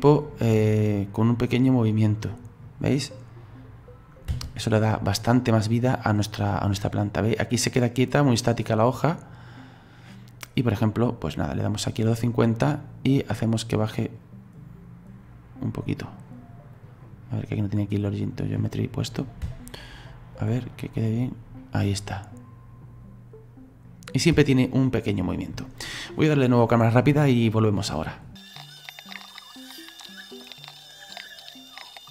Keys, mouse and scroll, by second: 0.8 scroll down 1, 1.3-1.9 scroll down 3, 4.3 space, 4.7 right click, 5.5-8.5 drag, 12.5 middle click, 13.1-13.6 scroll down 1, 13.6-14.2 scroll up 1, 14.2-17.0 drag, 17.8-19.4 drag, 19.4 space, 20.2 scroll up 2, 21.6-24.3 middle drag, 24.3 space, 24.5-27.6 middle drag, 27.8 middle click, 28.3 scroll down 1, 28.3 middle click, 28.4 click, 28.4 right click, 28.5 click, 28.5 middle click, 28.5 scroll up 1, 28.6 middle click, 28.6 scroll down 1, 28.6 scroll up 2, 28.7 click, 28.8 click, 28.8-30.0 typing, 29.1 scroll down 3, 29.1 click, 29.2 shift+middle click, 29.2 click, 29.3 click, 29.4 click, 29.5 middle click, 29.6 click, 29.7 click, 29.9 click, 30.0 middle click, 30.0 click, 30.3 scroll down 1, 30.3 middle click, 30.3 scroll up 4, 30.4 click, 30.6 shift+middle click, 30.7 scroll down 2, 30.7 scroll up 1, 30.8 click, 30.8 scroll down 1, 30.8 middle click, 31.1 Delete, 31.2 click, 31.3 middle click, 31.4-31.7 scroll up 4, 31.4 click, 31.7-32.1 typing, 31.8 middle click, 31.8 click, 31.9 right click, 31.9 middle click, 31.9 scroll down 3, 32.0 middle click.